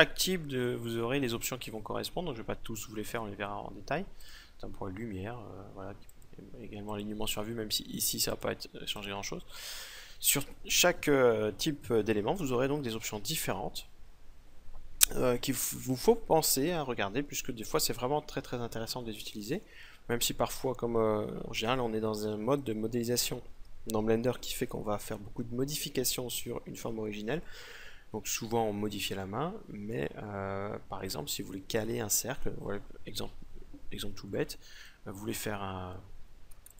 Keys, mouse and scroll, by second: 5.6-10.3 drag, 33.8-36.3 middle drag, 36.1 x.